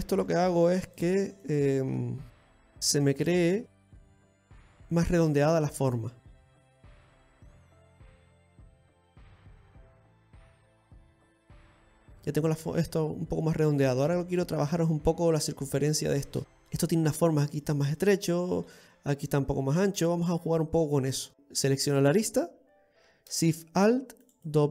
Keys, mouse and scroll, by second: 0.4 right click, 0.8 g, 2.1 right click, 2.4 middle click, 2.7 middle click, 4.5 ctrl+shift+right click, 4.9 g, 6.2 middle click, 8.0 right click, 8.9 g, 10.4 right click, 11.2 g, 12.3-12.6 scroll down 3, 12.5 middle click, 15.3-16.3 scroll up 4, 16.3 click, 16.3-16.7 scroll up 1, 16.7 middle click, 16.7 scroll down 2, 18.7 scroll down 1, 18.7 middle click, 20.6-21.1 scroll down 1, 21.1 middle click, 21.1 scroll down 1, 21.3 alt+shift+right click.